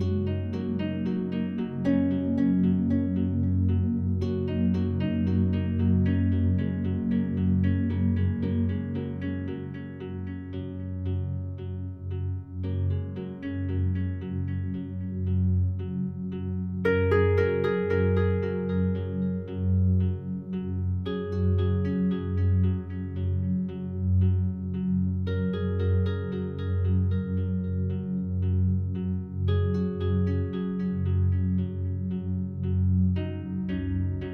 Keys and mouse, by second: 2.8 click, 3.8-4.8 drag, 4.8-5.6 typing, 6.0 Return, 7.2 space, 8.3 space, 9.6-11.3 drag, 11.4 space, 14.4 space, 15.1-23.5 drag, 23.6 Left, 23.7 Left, 24.4-25.3 drag, 28.3-31.9 drag, 32.5 click, 33.9 click.